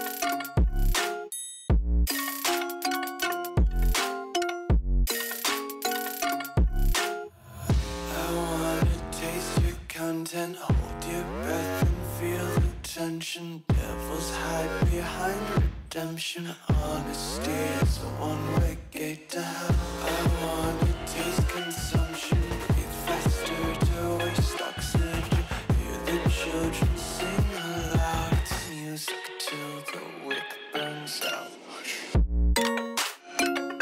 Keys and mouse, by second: 2.0 middle click, 2.2 3, 3.5-4.7 shift+drag, 7.7 Tab, 8.1 click, 8.2 w, 8.9 KP_1, 9.5 ctrl+f, 9.8 click, 10.6 shift+middle drag, 11.1 shift+middle click, 11.6 z, 13.7-14.3 drag, 17.8-18.4 drag, 20.8 click, 22.3 click, 23.5 click, 24.0 click, 25.1-25.4 middle drag, 26.0 middle drag, 26.5 middle click, 26.9 KP_1, 27.6 shift+a, 28.8 middle click, 29.2 click, 30.5 click, 31.7 middle click, 33.7 KP_1.